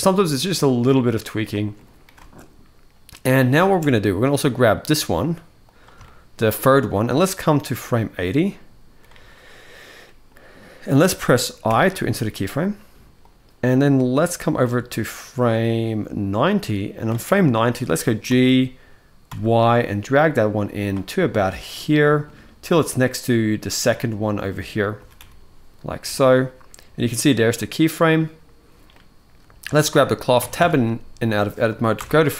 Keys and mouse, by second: 0.2 middle click, 1.3 shift+middle click, 1.9 space, 3.3 space, 3.6-3.9 middle drag, 5.8-6.1 shift+middle drag, 7.3-8.7 drag, 9.8 middle click, 11.4 i, 12.9-16.8 drag, 17.3-17.6 shift+middle drag, 18.0 g, 20.8 middle drag, 21.2 shift+middle drag, 21.6-22.0 middle drag, 23.5-24.3 middle drag, 24.7 g, 27.4-28.0 middle drag, 28.6-29.0 middle drag, 30.1 Tab, 30.6 Tab, 31.7 shift+Left.